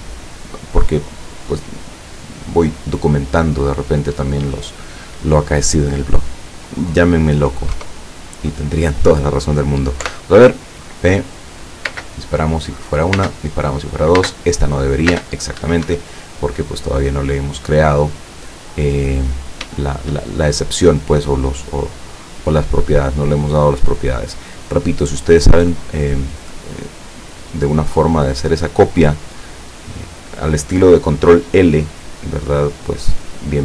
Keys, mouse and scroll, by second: 7.8 KP_0, 10.1 p, 12.0 space, 13.3 space, 14.3 space, 15.2 space, 15.7 Escape, 17.7 scroll up 2, 17.8 scroll down 2, 18.8-19.4 middle drag, 19.4 scroll down 2, 19.9 shift+middle click, 20.6 shift+right click, 22.5-23.4 drag, 23.7 click, 25.3 click, 26.8 click, 27.4 click, 28.5 click, 29.6 click, 33.0 click.